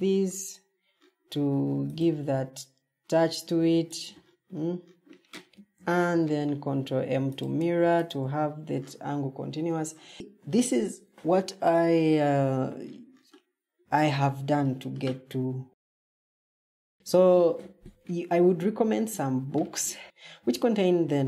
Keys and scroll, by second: 9.6 ctrl+shift+Escape.